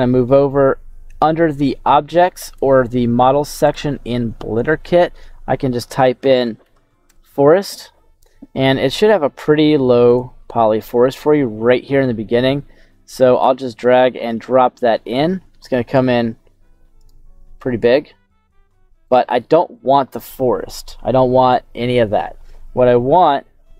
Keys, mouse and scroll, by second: 1.1 click, 3.6-7.1 drag, 10.1 click, 12.4 click, 14.6-15.3 scroll down 4, 16.0 a, 17.0 right click, 17.2 s, 19.1 click, 20.7 Delete, 21.2-22.5 middle drag, 23.3 middle click.